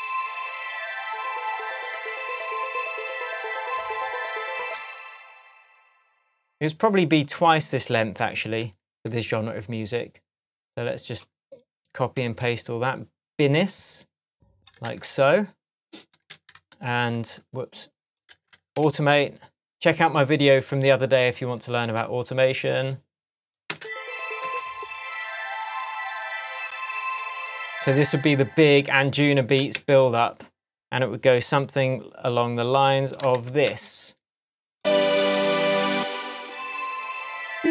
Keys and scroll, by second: 4.6 space, 8.5 super+i, 12.2 a, 14.9 super+c, 16.3 super+v, 17.2 super+z, 18.3 super+v, 18.8 super+a, 19.5 a, 23.7 space, 27.8 space, 29.8 super+d, 31.5 a, 33.4 super+d.